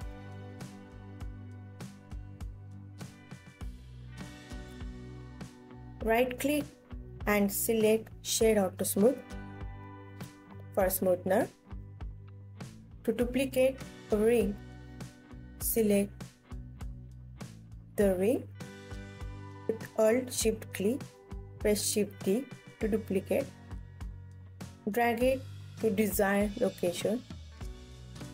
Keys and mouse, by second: 0.5 KP_1, 1.1-2.4 alt+middle drag, 2.4 alt+click, 4.1-7.3 drag, 7.4 KP_1, 7.9 ctrl+s, 9.8 click, 12.5 g, 12.9 Escape, 20.0 shift+d, 27.5 click, 27.9 click.